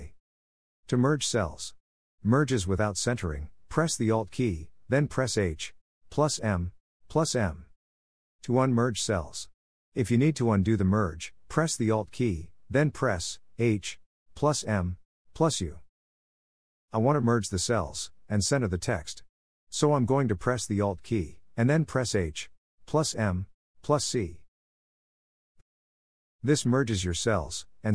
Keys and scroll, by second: 23.1 alt+h, 24.1 m, 27.1 c.